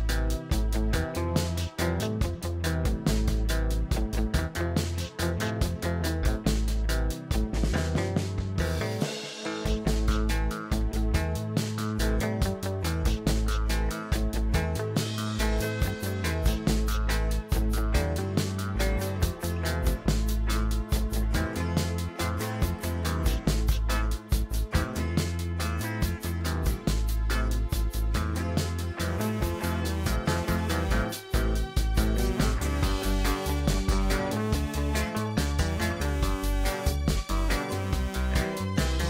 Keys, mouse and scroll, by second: 1.7 drag, 1.9 scroll down 1, 2.1-2.6 middle drag, 2.6-3.3 scroll up 1, 3.3 KP_0, 4.3-4.8 shift+middle drag, 4.8 scroll up 1, 5.1 n, 5.8 click, 6.6 click, 6.9-7.3 scroll down 2, 7.3-7.6 shift+middle drag, 7.6-8.1 scroll up 3, 8.1 shift+middle click, 8.4-9.6 shift+scroll up 2, 10.1 click, 10.8-11.4 middle drag, 11.4-12.5 scroll up 1, 12.5 n, 13.0 click, 14.1 click, 14.6-15.2 middle drag, 15.2 click, 15.9 click, 16.6 click, 18.4 click, 26.3 click, 26.7 middle click, 27.7 click, 28.0 scroll up 1, 28.5 scroll down 1, 28.6-29.1 middle drag, 29.1 click, 30.4 click, 30.8-34.7 drag, 35.4-36.4 middle drag, 36.4-39.0 drag.